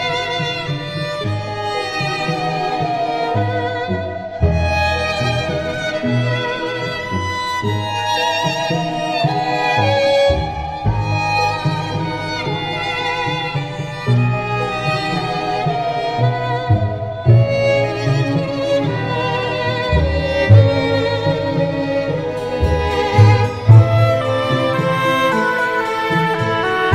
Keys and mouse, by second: 0.6 middle click, 2.6 right click, 5.3 middle click, 6.6 middle click, 7.5 middle click, 10.4 middle click, 12.6 right click, 18.1 middle click, 20.2 middle click, 21.6 right click, 22.8 middle click, 23.9 middle click.